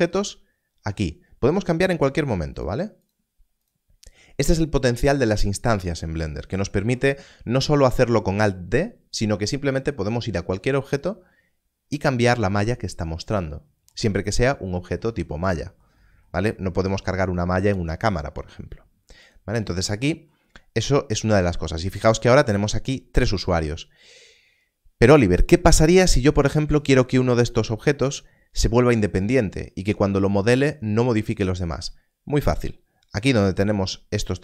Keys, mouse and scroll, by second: 1.8 click, 14.1 click, 19.3 click, 26.8 click.